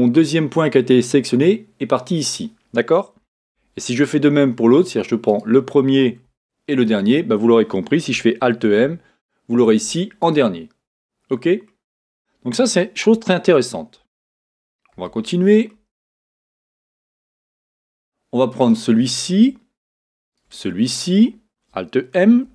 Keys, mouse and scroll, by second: 3.4 z, 5.4 click, 6.9 shift+click, 8.6 alt+m, 11.7 middle click, 14.9 z, 15.1-18.6 super+middle drag, 16.7 a, 18.6 click, 20.3 shift+click, 22.4 alt+m.